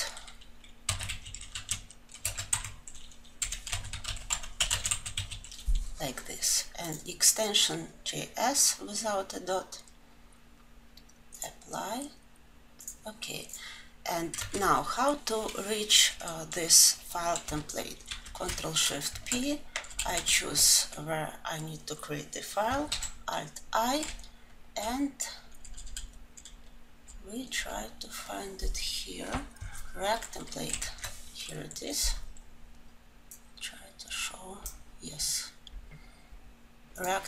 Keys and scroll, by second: 18.1 alt+1, 22.9 alt+Insert.